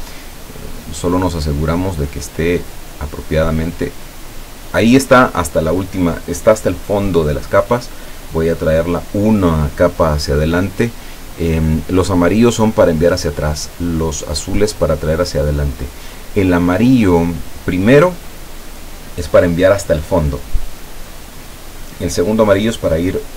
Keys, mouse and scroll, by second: 0.9 click, 2.1 click, 2.8 click.